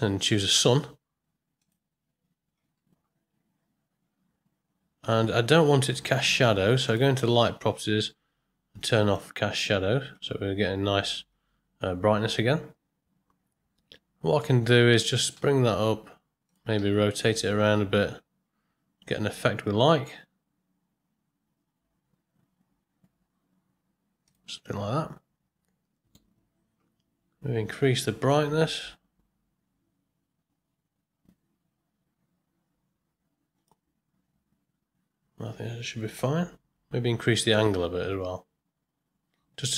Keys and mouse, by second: 5.9 middle click, 6.8 click, 9.1 click, 14.5-15.0 middle drag, 15.4 g, 16.8 r, 28.4-33.7 drag, 37.3-39.7 drag.